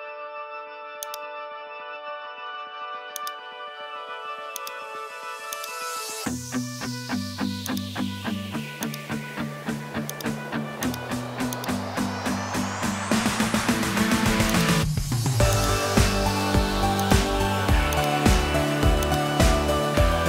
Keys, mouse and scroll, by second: 1.0 click, 3.2 click, 4.6 click, 5.5 click, 7.7-8.9 drag, 10.1 click, 12.8 l, 14.6-15.6 drag, 17.0 click, 19.1 click, 20.1 Tab.